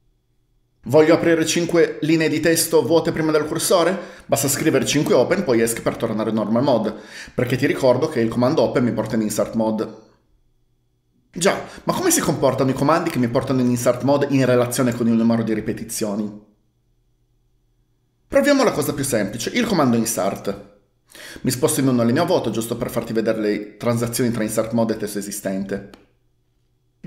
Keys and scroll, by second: 5.1 typing, 5.8 Escape, 21.9-23.1 typing.